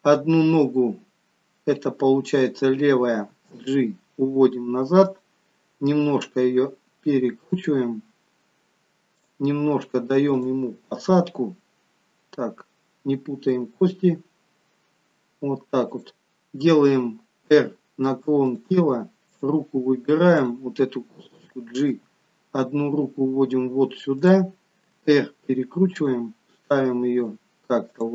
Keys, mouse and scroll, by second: 3.3 g, 6.0 r, 9.2 click, 10.3 click, 11.9-12.6 scroll up 1, 13.7 g, 17.4 r, 19.2 click, 20.4 click, 22.0 g, 25.0 r, 26.9 g.